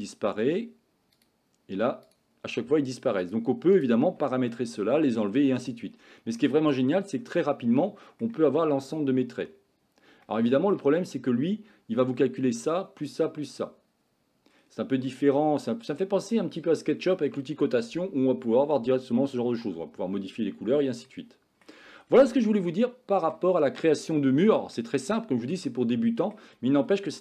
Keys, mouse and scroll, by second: 1.2 click, 2.1 click, 3.3 click, 3.8 click, 4.6-5.6 middle drag, 6.5-8.3 middle drag, 10.3 middle click, 15.1 middle click, 21.1 middle click, 22.7 shift+middle click, 23.6 middle click, 24.8 shift+middle click, 26.0 middle click.